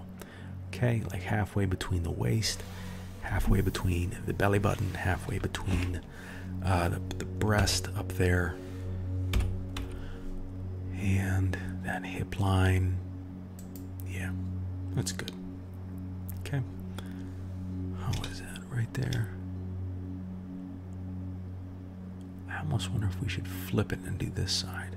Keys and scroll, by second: 9.3 g.